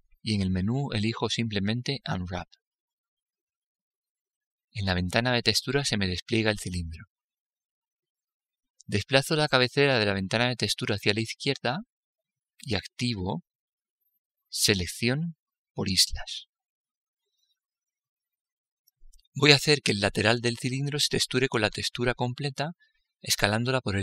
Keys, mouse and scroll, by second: 0.0 u.